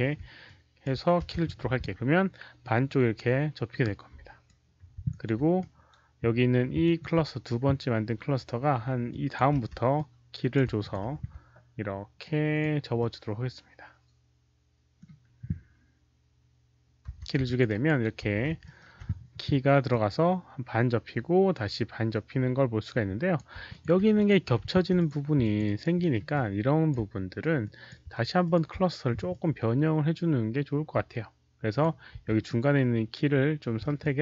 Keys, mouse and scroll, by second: 0.4 alt+click, 0.9-2.8 typing, 1.1 middle click, 1.5 middle click, 2.5-4.4 alt+drag, 5.0 alt+click, 5.2-5.9 typing, 5.5 alt+click, 6.7 ctrl+click, 8.8-13.4 typing, 9.0 ctrl+click, 9.9 ctrl+click, 10.7 ctrl+alt+click, 12.1 ctrl+click, 12.9-14.9 middle drag, 14.9 s, 16.8-18.6 typing, 17.0 middle click, 17.4 ctrl+alt+click, 17.6 alt+right click, 17.7 middle click, 18.5 alt+middle click, 19.8-23.3 alt+drag, 20.9-23.8 typing, 21.2 alt+middle click, 21.2 alt+right click, 21.6 alt+middle click, 22.0 alt+middle click, 22.0 alt+right click, 23.3 alt+middle click, 23.3 alt+right click, 23.6 alt+click, 24.1 alt+click, 24.9 alt+click, 25.3 alt+click, 25.5 s, 25.5 alt+right click, 25.9 alt+middle click, 26.2 alt+click, 27.5 alt+click, 28.3 ctrl+click, 29.2-31.7 ctrl+alt+drag, 31.7 alt+middle click, 31.7 alt+right click, 32.0 w, 32.4-33.7 alt+middle drag, 33.4 ctrl+click, 33.9 alt+w, 33.9-34.2 ctrl+alt+drag, 33.9 alt+right click.